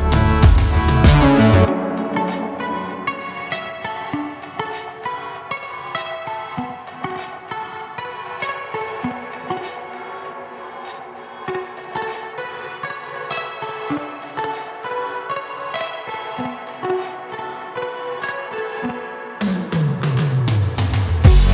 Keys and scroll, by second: 4.9 ctrl+KP_Subtract, 14.7 s.